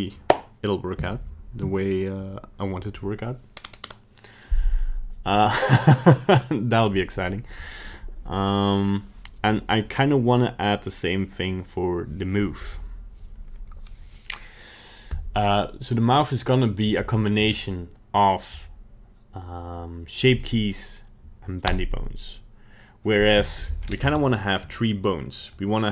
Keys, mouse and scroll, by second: 23.8-24.1 scroll up 4, 24.3-25.8 shift+middle click, 24.8 middle click, 25.0-25.4 middle click, 25.2 middle click, 25.4 middle click.